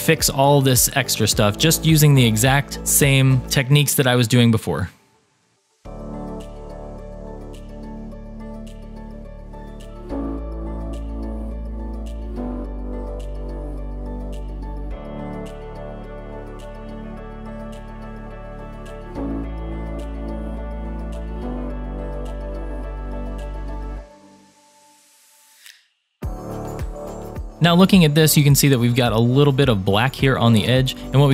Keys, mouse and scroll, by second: 1.6 middle click, 3.1 shift+middle click, 4.7 click, 5.7 click, 5.9 g, 6.4 scroll up 2, 6.5 shift+middle click, 6.6 click, 6.8 s, 7.2 g, 7.3 click, 7.6 g, 8.1 click, 8.2 middle click, 8.5 scroll up 2, 8.5 shift+middle click, 8.6 click, 8.9 a, 8.9 g, 9.2 click, 9.2 shift+middle click, 9.5 a, 9.7 g, 9.9 click, 10.1 middle click, 10.7 middle click, 11.0 shift+middle click, 11.1-11.4 scroll down 4, 11.5-12.2 typing, 12.7 click, 12.7 scroll up 2, 12.8 shift+middle click, 13.3 click, 13.3 g, 13.6 click, 13.6 middle click, 13.8 click, 14.1 shift+click, 14.2 middle click, 14.3 scroll down 1, 14.7 a, 14.7 g, 15.1 click, 15.1 middle click, 15.3 scroll down 1, 15.4-16.0 scroll up 2, 15.5 shift+middle click, 15.7 click, 16.0 g, 16.0 x, 16.1 a, 16.6 click, 16.7 middle click, 16.8 shift+middle click, 17.0 middle click, 17.2 middle click, 17.4 shift+middle click, 17.7 click, 18.0-20.8 typing, 18.3 scroll down 4, 18.5 shift+middle click, 19.0 scroll up 4, 19.0 shift+middle click, 19.7 click, 19.8 middle click, 20.1 scroll up 1, 20.2 shift+middle click, 21.2 click, 21.4 middle click, 21.8 middle click, 21.9 click, 22.0 scroll down 3, 22.1 shift+middle click, 22.1 scroll up 1, 22.2 shift+middle click, 22.4 a, 22.5 g, 23.1 click, 23.1 shift+middle click, 23.2 scroll down 2, 23.8 click, 23.9 shift+click, 23.9 shift+click, 24.3 middle click, 24.5 shift+click, 24.6-25.0 scroll down 4, 24.6-26.6 typing, 24.9 shift+middle click, 25.6 scroll up 3, 25.6 shift+middle click, 27.1 scroll down 1, 27.1 middle click, 27.4 shift+click, 27.4 scroll up 3, 30.3 click.